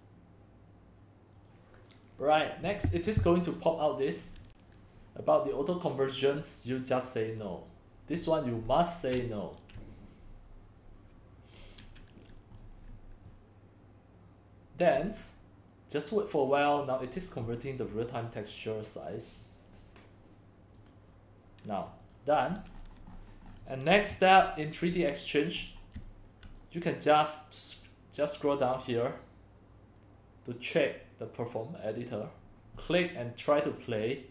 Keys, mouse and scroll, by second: 0.0-8.6 drag, 9.5-14.5 drag, 21.0-22.8 drag, 22.8 scroll down 1, 22.9 scroll down 1, 22.9-23.2 scroll down 1, 23.1 scroll, 23.2 scroll down 1, 23.3 scroll down 1, 23.4 scroll up 10, 23.5 scroll, 23.6 scroll up 3, 23.9 click, 24.1 x, 24.4 c, 25.5 click, 25.6 scroll, 26.6 click, 29.1 click, 29.2-29.8 scroll down 4, 29.3 middle click, 29.3 click, 29.4 middle click, 29.6 middle click, 29.7 click, 29.7 middle click, 30.5 click, 32.0-34.3 drag.